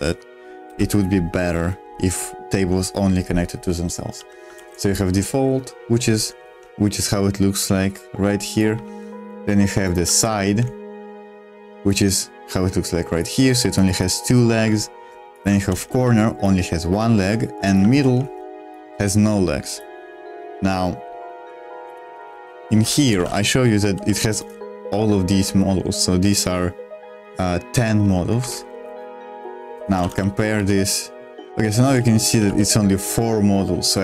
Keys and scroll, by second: 0.7 u, 4.2 j, 4.5 shift+v, 6.5 super+2, 8.8 super+1, 10.1 shift+v, 10.4 super+2, 14.5 super+1, 15.6 shift+v, 15.9 super+2, 17.1 super+1, 17.9 shift+v, 18.2 super+2, 21.3 super+3, 22.2-25.3 typing, 22.8 Escape, 28.4 Escape, 28.8 super+1, 29.7-32.9 typing, 33.8 Escape.